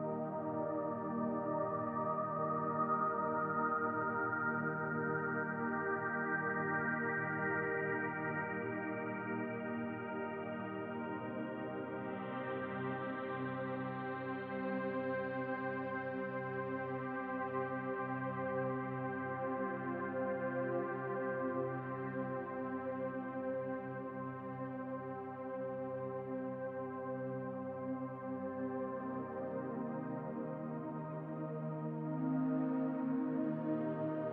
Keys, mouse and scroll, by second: 1.2 click, 3.9 shift+d, 4.9 click, 6.4 r, 8.2 s, 9.5 click, 11.0 click, 13.5 shift+d, 15.8 s, 17.3 click, 18.8 click, 20.2-20.8 scroll down 1, 20.8 middle click, 20.8-21.3 scroll down 2, 21.5 scroll up 4, 22.2 scroll up 3, 22.3 shift+middle click, 22.8-23.2 scroll up 1, 23.2 middle click, 24.9 click, 26.3 middle click, 27.0 click, 28.1 l, 28.8 click, 29.3 click, 29.5 l, 30.1 click, 32.2 middle click, 33.1 click, 33.5 l.